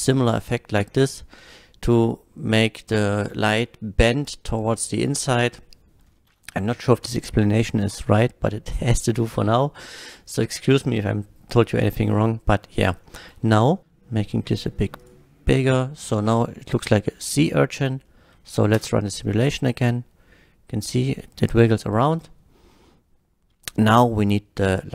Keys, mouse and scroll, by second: 5.6 middle drag, 10.0 scroll up 1, 13.1-13.8 middle drag, 13.8 s, 15.0 click, 15.7 click, 16.5 middle drag, 16.8-17.1 scroll up 1, 17.3-17.7 middle drag, 17.8-18.1 scroll down 1, 18.1 middle click, 18.8 space.